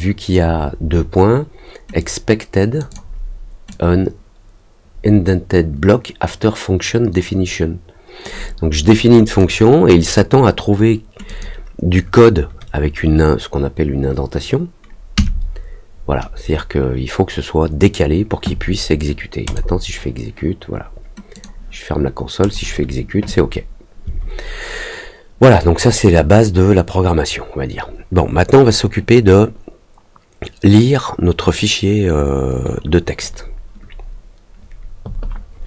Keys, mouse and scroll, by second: 1.9 click, 2.8 click, 3.6-8.2 drag, 9.3 click, 11.2 click, 19.4 click, 21.3 click, 22.4 click.